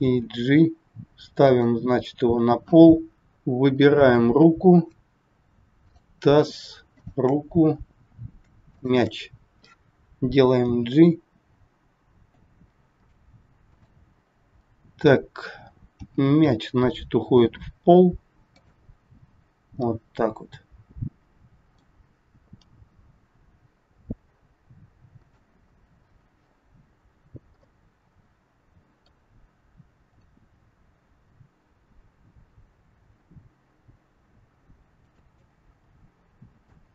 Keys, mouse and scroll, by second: 0.0 g, 3.2 click, 3.8 scroll up 3, 5.9 shift+click, 6.9 shift+click, 7.8 scroll down 1, 8.4 scroll down 2, 8.6 shift+click, 10.6 g, 12.9 click, 13.7 click, 14.1 scroll down 2, 15.9 scroll down 1, 15.9 g, 19.8 middle click, 22.5 g, 27.5 middle click, 30.2 click, 32.3 g, 35.4 middle click.